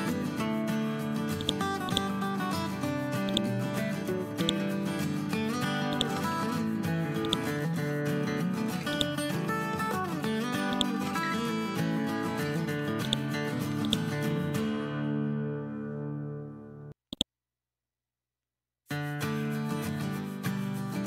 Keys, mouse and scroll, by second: 10.9-11.6 click, 14.2 scroll down 2, 14.9-15.6 scroll up 1, 17.1 click.